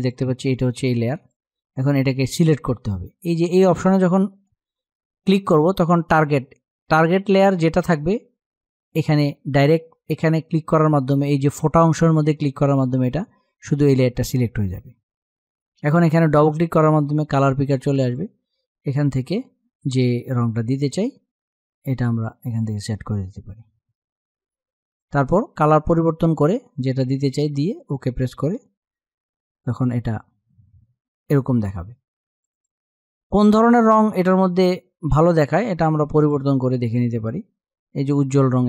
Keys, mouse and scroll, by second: 15.5-27.5 drag, 32.0-38.6 drag.